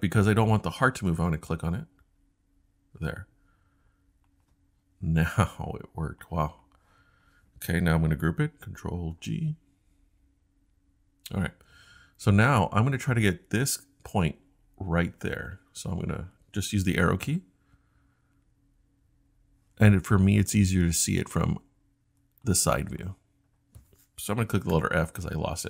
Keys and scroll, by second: 9.2 super+g, 16.7 Up, 17.2 Up, 17.3 Up, 17.8 Up, 17.9 Up, 18.4 Up, 19.0 Up, 19.1 Up, 19.6 Up, 19.7 Up, 24.7 f.